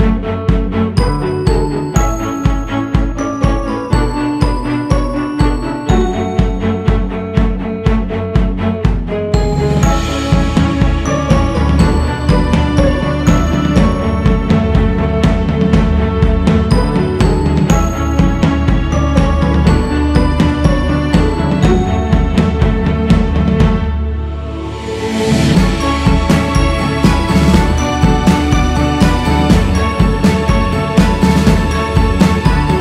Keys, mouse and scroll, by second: 6.6-7.1 scroll down 4, 7.1-7.6 scroll up 4, 8.0-10.4 drag, 10.4-10.8 scroll down 5, 10.8 alt+shift+z, 13.0-13.5 scroll up 8, 13.5 f, 14.5 g, 15.9-17.3 drag, 17.3-18.3 shift+scroll up 1, 18.8 click, 19.4-21.0 scroll down 8, 21.7-22.3 scroll down 3, 22.3-24.8 drag, 24.8-25.3 scroll down 3, 25.3 click, 27.8-28.5 scroll up 1, 28.5 click, 29.1-30.3 scroll up 3, 30.9 q, 32.0 f.